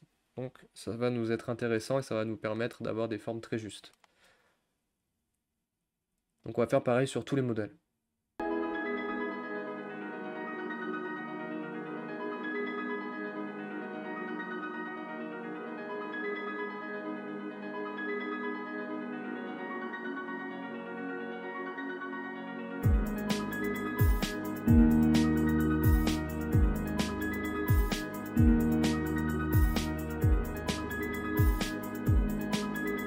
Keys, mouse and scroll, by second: 0.3 click, 5.2 click, 6.4 shift+click, 8.4-11.1 typing, 8.7 click, 9.9 drag, 10.9 click, 12.1 Tab, 12.5 ctrl+z, 12.8 click, 13.3-15.4 typing, 13.7 click, 14.4 click, 15.2 click, 15.9 click, 17.0 drag, 17.4-22.9 typing, 17.6 shift+click, 17.8 click, 18.4 click, 19.5 click, 20.3 click, 20.8 click, 21.4 click, 21.7 click, 21.9 click, 22.2 click, 22.5 click, 23.3 click, 24.0 Tab, 24.1 click, 24.5-26.2 typing, 24.6 click, 24.8 click, 25.4 click, 26.0 click, 27.1 click, 27.4 Tab, 27.5 click, 27.8-29.5 typing, 27.8 click, 28.0 click, 28.6 click, 29.3 click, 30.3 click, 30.8 Tab, 30.8 click, 31.1-32.9 typing, 31.1 click, 31.3 click, 31.5 click, 31.9 Tab, 32.0 click, 32.6 click, 32.7 scroll down 5.